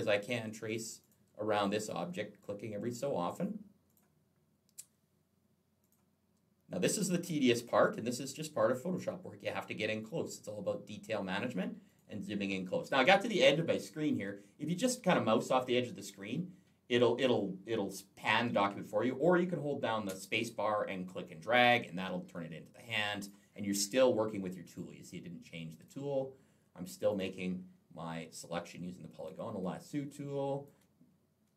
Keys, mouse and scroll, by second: 0.8 click, 3.7 click, 5.7 click, 7.4 click, 9.3 click, 11.7 click, 19.9 space, 20.3 click, 23.0 click, 24.5 click, 25.6 click, 26.9 click, 29.0 click, 29.5 space, 29.7 click.